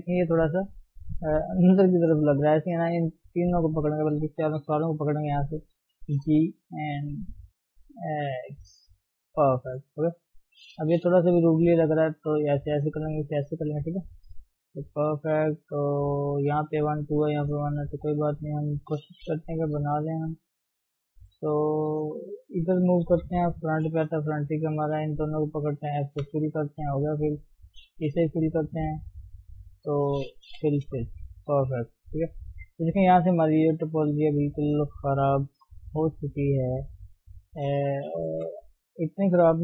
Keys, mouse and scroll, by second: 0.7-2.2 middle drag, 2.2 shift+click, 2.7 shift+click, 3.5 shift+click, 4.1 shift+click, 4.8 KP_1, 5.9 g, 9.9 click, 10.1-11.8 shift+middle drag, 11.8 g, 13.9-14.9 middle drag, 14.9 scroll up 1, 15.6 click, 16.6 click, 17.0 click, 17.9 click, 18.3 shift+click, 19.4 e, 23.1 KP_1, 24.9 click, 26.2 f, 26.7-28.2 middle drag, 28.2 f, 29.2 click, 30.6 f, 30.9 f, 31.1 scroll down 3, 31.4 middle click, 31.9 scroll up 3, 32.1-37.4 middle drag, 37.4 click, 38.2 g, 39.4 KP_1.